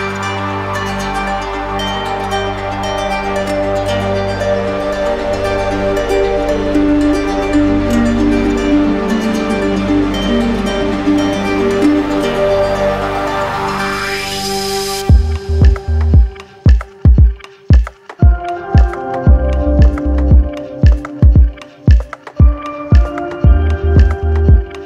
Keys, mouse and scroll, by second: 0.5 click, 2.1 click, 3.1 ctrl+d, 4.3 ctrl+d, 8.0 click, 8.4 shift+click, 9.0 alt+click, 9.4 alt+click, 9.7 click, 10.7 click, 11.9 click, 12.6 ctrl+d, 14.3 ctrl+d, 16.1-17.1 drag, 17.4 click, 20.9 click, 21.3 alt+click, 21.4 alt+click, 22.9 click, 23.3 click, 24.5 alt+click, 24.7-24.8 typing.